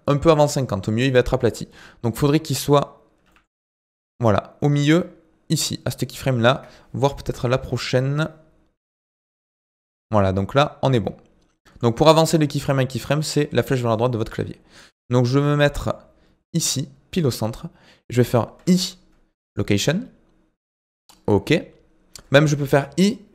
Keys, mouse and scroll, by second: 1.7-2.3 scroll up 5, 2.3-3.2 scroll down 2, 3.2 g, 7.4 Right, 8.7 g, 13.3-13.9 scroll up 8, 13.9 shift+middle click, 14.6-15.7 scroll down 1, 15.7 g.